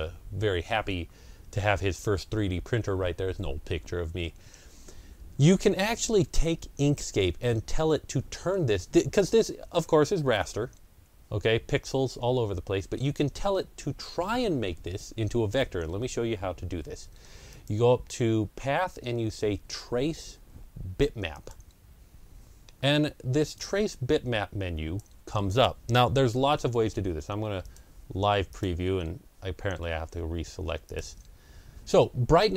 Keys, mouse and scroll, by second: 9.6-10.8 middle drag, 9.6 scroll down 1, 10.8 ctrl+scroll down 1, 12.2 ctrl+scroll down 1, 12.7 ctrl+scroll down 1, 17.4 click, 17.4-19.6 ctrl+scroll down 1, 21.2 click, 21.2-23.4 ctrl+scroll down 1, 23.4-27.3 drag, 27.5-30.7 drag.